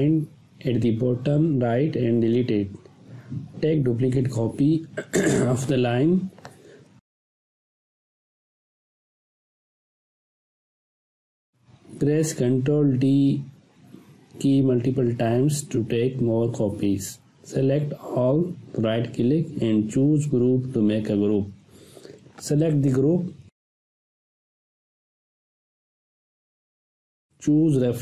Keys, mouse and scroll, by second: 1.5 Delete, 2.8 click, 3.5 space, 3.6-4.6 ctrl+drag, 11.9 ctrl+d, 17.2-17.8 click, 18.4 right click, 19.6 click.